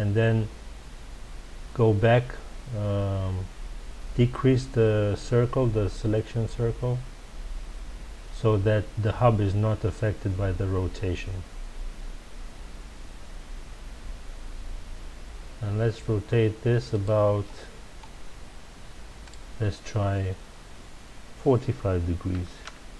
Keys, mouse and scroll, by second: 17.0 click, 19.2-22.2 drag.